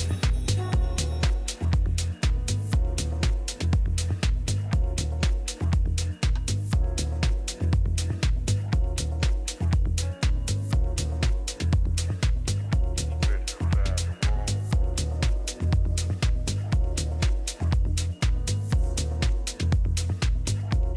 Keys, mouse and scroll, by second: 0.0 a, 2.7-4.5 right drag, 4.2 g, 6.9 a, 7.7-9.4 right drag, 8.5 g, 9.5 click, 11.6 a, 12.8-14.8 middle drag, 15.8 a, 16.3 a, 16.7-20.7 middle drag, 18.1 a, 18.4 a, 20.9 a.